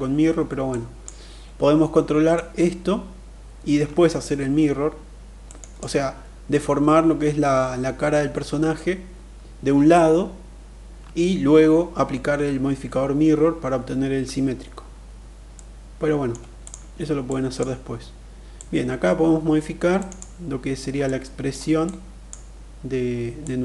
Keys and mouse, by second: 0.0 click, 1.7-4.9 drag, 4.9 middle click, 5.1 click, 15.0 middle click, 16.0 click, 16.7 click, 17.9-19.5 drag, 19.5 middle click, 19.6 click, 20.5 middle click, 21.3 click, 23.0 click.